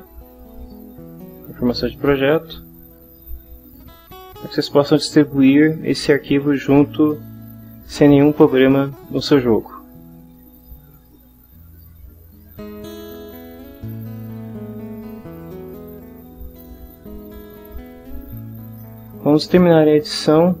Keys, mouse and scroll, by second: 3.9-12.0 drag, 13.4 ctrl+w, 15.5 click.